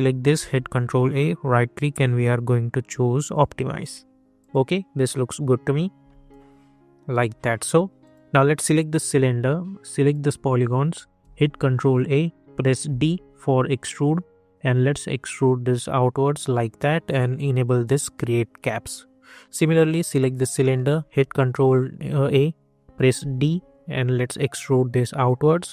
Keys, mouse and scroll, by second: 0.5 ctrl+a, 1.1 right click, 3.3 click, 4.9 scroll down 1, 6.3-8.0 alt+drag, 8.7 scroll up 1, 10.0 click, 11.2 ctrl+a, 11.7 scroll up 1, 12.8 d, 13.6-17.8 drag, 20.2 scroll down 1, 21.0 ctrl+a, 21.6 scroll up 1, 23.1 d, 23.7-25.7 drag.